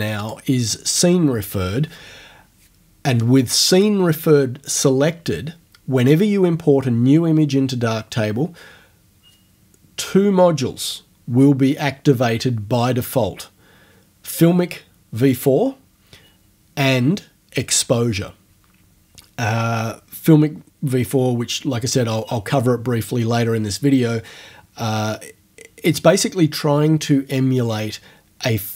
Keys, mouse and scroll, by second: 0.2 click.